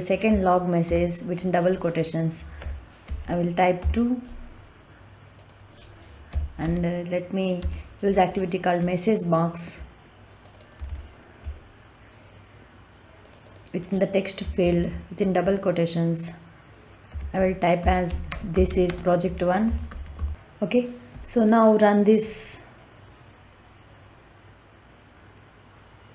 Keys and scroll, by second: 0.8 shift+', 2.5 t, 3.0 w, 3.7 o, 6.2 m, 6.5 e, 7.5 s, 14.5 shift+', 17.0-20.0 typing.